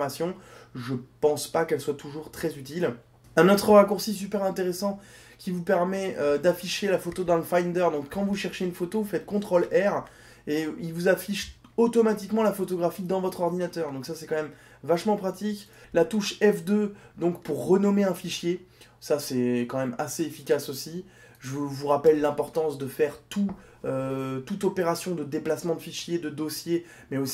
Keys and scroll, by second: 8.3 ctrl+r, 16.2 F2.